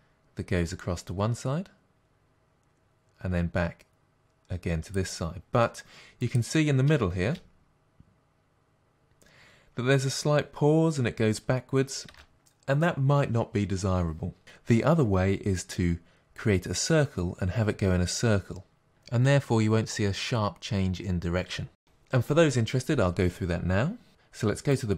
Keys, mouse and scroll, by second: 7.3 space, 12.4 space, 24.8 click.